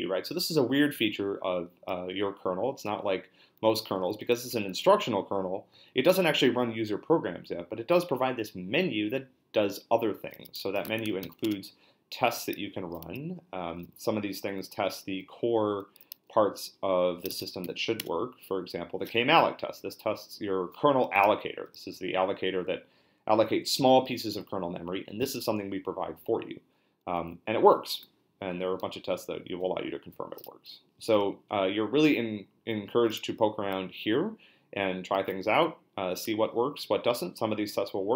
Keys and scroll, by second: 10.7-11.7 typing, 17.1-18.1 typing, 35.1 q.